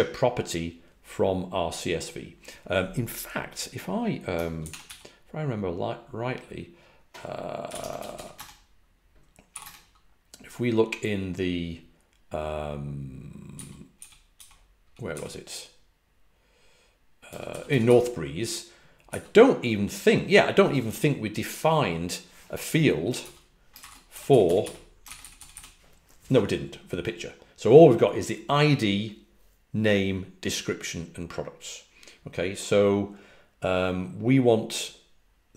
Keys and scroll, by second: 7.3-9.5 typing, 13.2-15.0 typing, 16.9-19.0 typing, 23.1 typing, 24.3-25.4 typing.